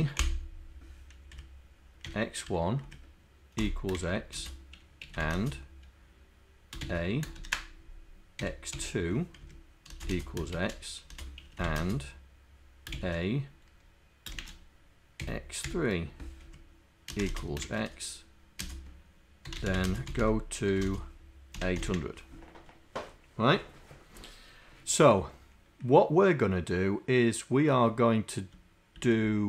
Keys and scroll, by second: 0.2 Left, 1.3 Right, 2.5 1, 2.9 Right, 3.9-5.8 typing, 7.4 shift+0, 8.4 x, 9.5 Down, 9.9-12.3 typing, 14.4 shift+0, 15.7 3, 16.6 Down, 17.1-21.8 typing, 29.3 Down.